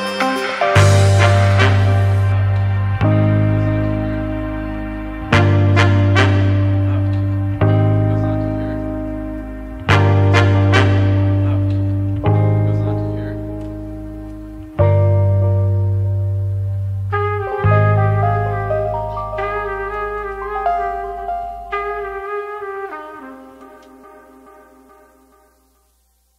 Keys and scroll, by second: 12.4-13.9 typing, 13.7 Tab, 14.1 Return, 21.7 ctrl+k, 23.4 ctrl+k, 23.7 2.